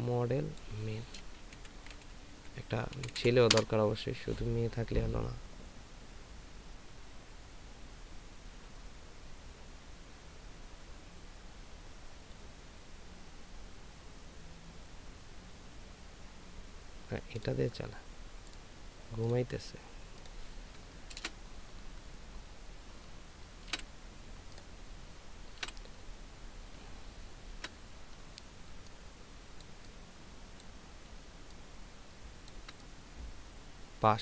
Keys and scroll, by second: 1.6-3.2 typing, 3.5 Return, 23.7 ctrl+z, 25.6 ctrl+v, 27.5 ctrl+t.